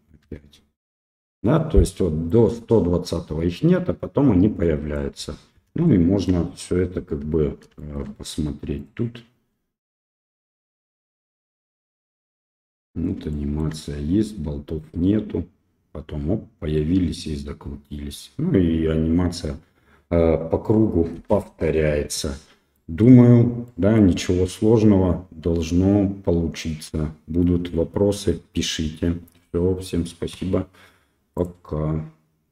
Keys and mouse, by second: 0.2 i, 1.0 i, 2.3-4.9 drag, 5.8-6.2 shift+middle drag, 7.8 shift+middle click, 10.3 click, 11.3 space, 13.3 shift+middle click, 21.1 space, 22.8 click, 23.8 middle click.